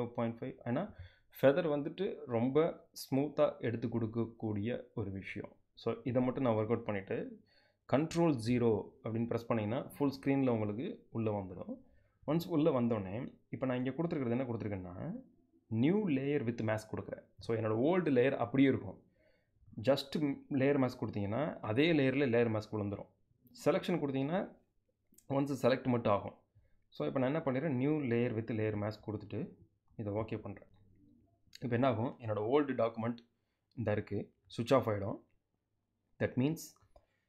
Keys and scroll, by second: 8.2 super+0.